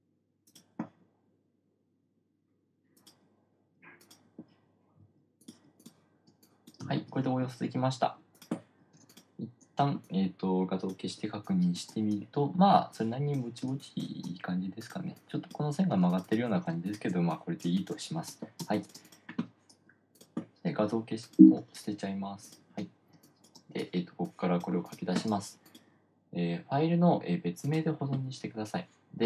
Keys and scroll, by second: 6.7 space, 7.1 space, 9.3 space, 14.1 space, 16.3 space, 19.1 space, 23.5 space.